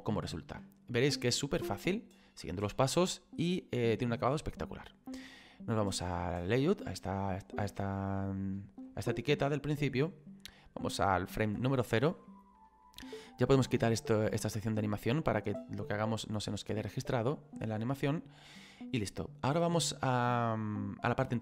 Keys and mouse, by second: 6.0 click, 8.5 shift+middle click, 10.6 click, 12.3 shift+middle click, 15.0 click, 16.1 shift+middle click.